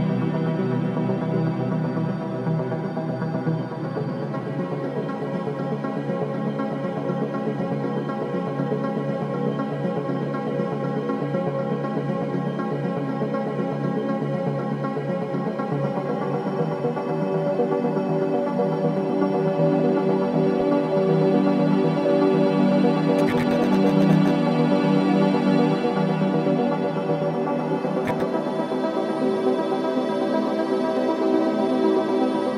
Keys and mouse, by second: 0.9 shift+d, 3.2-4.4 shift+drag, 4.5 g, 4.9 1, 5.8-9.0 drag, 8.8-10.0 typing, 12.5-13.4 shift+drag, 13.7-21.5 drag, 21.9-25.7 drag, 25.4-26.1 typing, 27.2-28.0 typing, 27.3-28.9 shift+drag, 29.2-29.9 typing, 31.1-32.5 shift+drag.